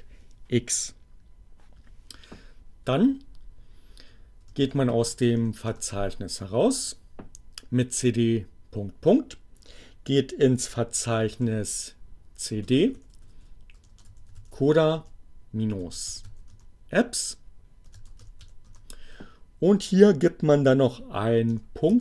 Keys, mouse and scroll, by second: 3.4-4.3 typing, 5.3 Return, 11.1-18.9 typing, 16.5 Return, 21.3-22.0 typing.